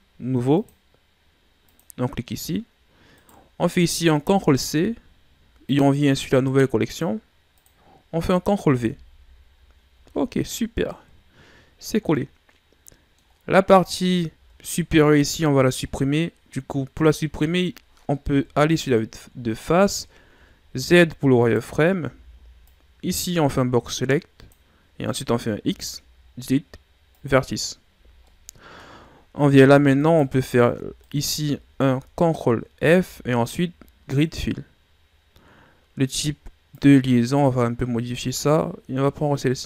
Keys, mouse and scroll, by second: 0.6-1.6 right drag, 1.6 click, 3.2 right click, 4.2 ctrl+c, 5.6 click, 6.9 click, 7.5 click, 8.8 ctrl+v, 10.1 scroll down 2, 14.1 middle click, 14.3 Tab, 15.8 middle click, 16.2-17.4 scroll up 2, 17.4-18.0 ctrl+scroll up 1, 18.2 KP_1, 19.4 scroll down 3, 20.0 shift+scroll up 4, 20.6 z, 21.6 right click, 22.0 b, 25.6 x, 27.9 z, 28.2 middle click, 28.8-30.0 scroll up 6, 30.0 alt+right click, 31.0 alt+right click, 32.7 ctrl+f, 36.7-39.0 drag, 39.0-39.4 scroll down 5.